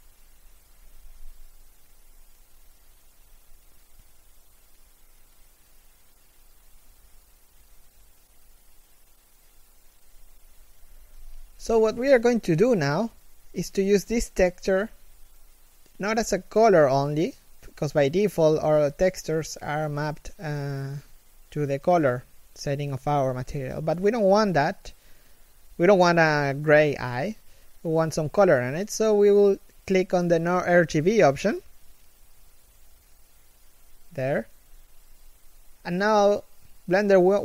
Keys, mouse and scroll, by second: 14.6 scroll up 1, 18.9 scroll down 1.